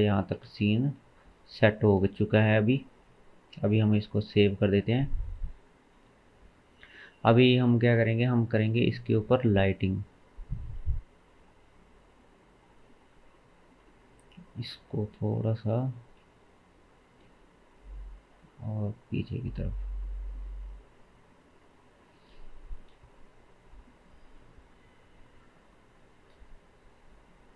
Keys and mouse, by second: 0.4 KP_0, 1.5-8.2 shift+middle drag, 4.0 ctrl+s, 5.2 ctrl+s, 8.2-14.0 drag, 12.9 n, 14.0 Tab, 15.0 2, 16.0 g, 21.9 Tab, 25.3-27.5 drag.